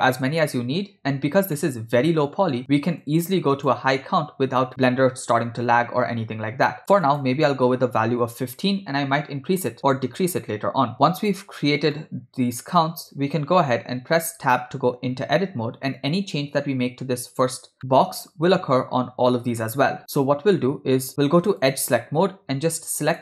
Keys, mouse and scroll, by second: 1.6 middle click, 3.1 click, 4.7-6.8 ctrl+middle drag, 7.1-9.5 drag, 10.9 ctrl+middle click, 12.0-12.9 shift+middle drag, 14.3 Tab, 17.8 middle click, 20.1 shift+middle click, 21.6 click, 23.1 click.